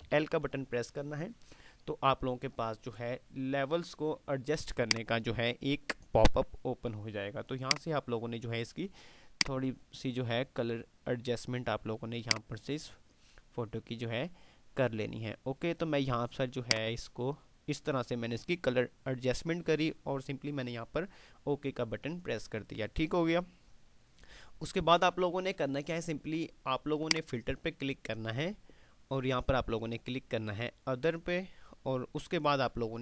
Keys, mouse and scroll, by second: 0.1 ctrl+l, 4.8 click, 5.0-5.5 drag, 27.3 click.